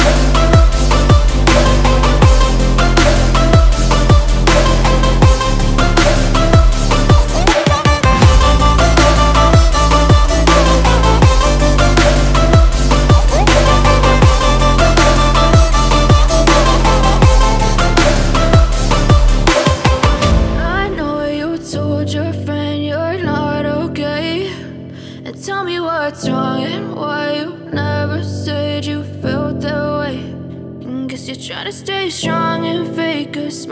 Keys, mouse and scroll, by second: 2.2 ctrl+z, 3.1 ctrl+z, 4.1 double click, 7.5 double click.